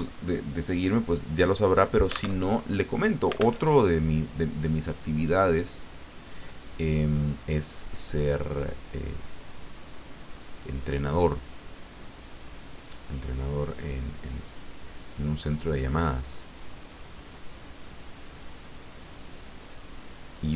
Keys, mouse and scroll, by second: 2.4 alt+Tab, 3.6 alt+Tab, 5.2 click, 5.7 click, 6.4 click, 7.9 click, 10.5 click, 13.4-14.0 scroll down 4, 14.3 click, 16.4 click, 17.1 click, 18.6 click, 19.0-20.3 drag.